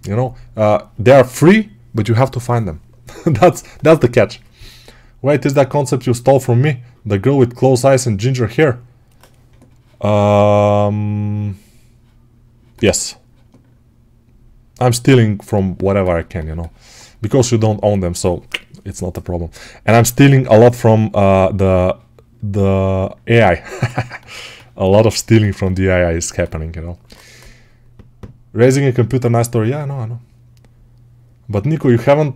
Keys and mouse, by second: 11.7-13.6 right drag, 14.5-32.3 right drag.